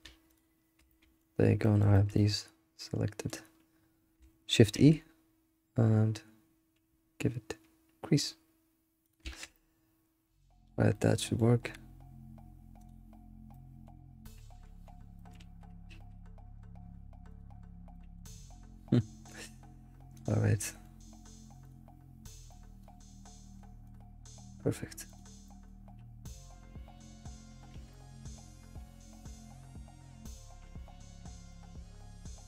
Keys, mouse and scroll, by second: 0.3 alt+shift+click, 0.9-3.5 middle drag, 3.5 scroll up 1, 4.7 shift+e, 9.2 alt+shift+z, 9.5-13.1 middle drag, 13.1 click, 13.5-14.0 middle drag, 14.0 scroll down 2, 14.2-15.4 middle drag, 15.4 alt+shift+z, 17.5 click, 17.9 middle click, 18.3 scroll up 2, 20.3-20.6 drag, 20.6-22.7 middle drag, 22.7-25.4 drag, 25.4 middle click, 25.9-27.1 scroll up 1, 27.1 click, 27.3 scroll down 4, 27.9 middle click, 28.1 alt+shift+z, 28.8 alt+shift+z, 30.0 click, 30.3 middle click, 31.3 scroll down 1, 31.5-32.4 middle drag.